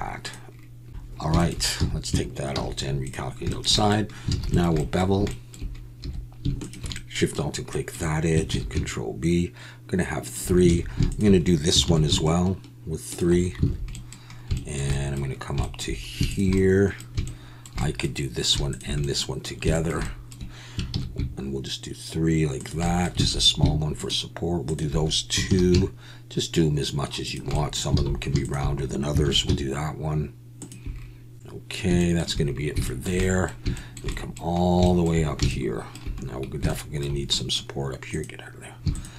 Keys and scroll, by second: 1.8 a, 2.7 alt+n, 4.4 alt+a, 6.0 2, 8.5 ctrl+b, 10.7 alt+a, 11.8 ctrl+b, 20.9 ctrl+b, 23.2 alt+a, 25.5 ctrl+b, 28.0 alt+a, 29.2 ctrl+b.